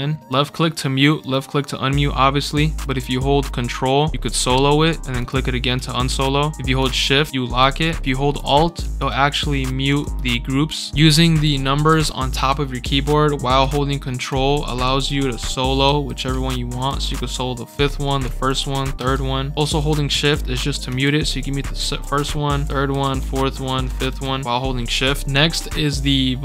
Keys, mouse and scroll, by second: 0.3 click, 1.2 click, 5.2 ctrl+click, 6.8 shift+click, 8.9 alt+click, 9.8 alt+click, 11.1-12.8 typing, 14.2 ctrl+1, 14.6 ctrl+scroll down 2, 14.8 ctrl+1, 15.2 ctrl+2, 15.8 ctrl+3, 16.3 ctrl+4, 16.7 ctrl+5, 17.6 ctrl+5, 18.2 ctrl+1, 19.0 ctrl+3, 20.1-24.6 typing, 25.7-26.4 drag, 25.9 scroll up 1.